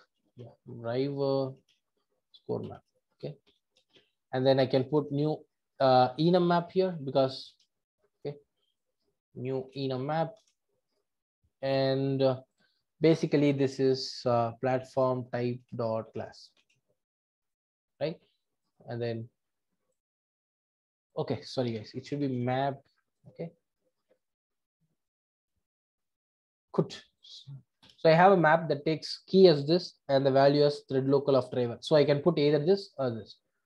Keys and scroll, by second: 10.4 Return, 11.3 Return, 15.6 Return, 18.9 alt+Return, 24.0 alt+Return, 25.4 alt+Return.